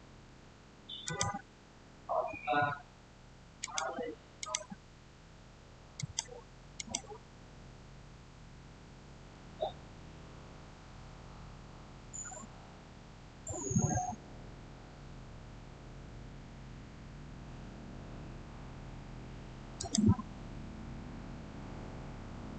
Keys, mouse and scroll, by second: 0.9 click, 3.5 click, 16.7 scroll up 1, 19.6 scroll up 1, 19.6 click.